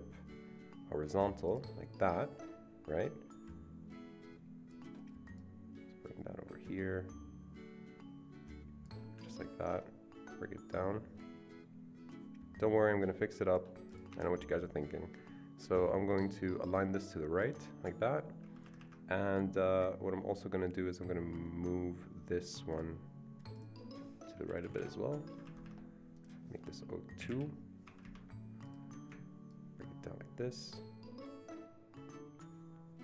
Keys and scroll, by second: 14.1 Escape, 18.4 Escape, 18.6 Escape, 18.8 Escape, 24.5 Right, 24.6 Right, 24.8 Right, 25.3 Escape, 25.6 Escape, 27.3 Delete, 27.8 Escape, 28.4 Escape.